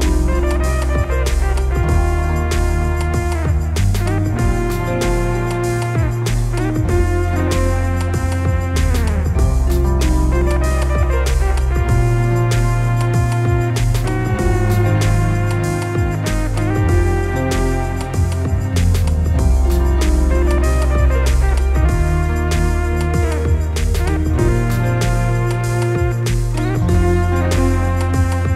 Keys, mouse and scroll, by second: 0.8 scroll up 2, 1.0-1.5 scroll down 2, 4.6 scroll down 1, 4.7 `, 5.9 click, 7.0 click, 8.6-10.2 drag, 16.2 click, 18.6 click, 20.6-28.5 drag.